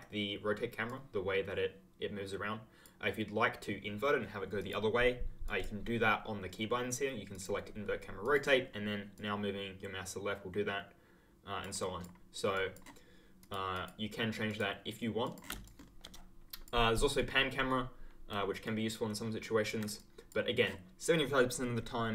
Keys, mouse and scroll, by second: 0.8 click, 4.5 click, 7.3 click, 8.3 click, 11.1 click, 15.6 ctrl+click, 15.7 ctrl+scroll down 1, 15.9-16.7 ctrl+scroll, 17.1 ctrl+right click, 19.9 click.